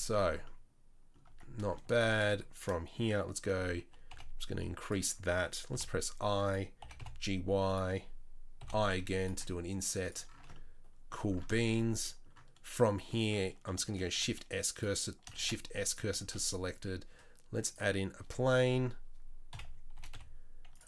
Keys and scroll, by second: 1.3 Tab, 3.4 g, 5.7 i, 6.8 g, 8.6 i, 9.4 e, 10.4 Tab, 14.0 shift+s, 15.4 shift+s, 16.2 shift+a, 18.2 Tab, 19.5 KP_7, 20.0 g.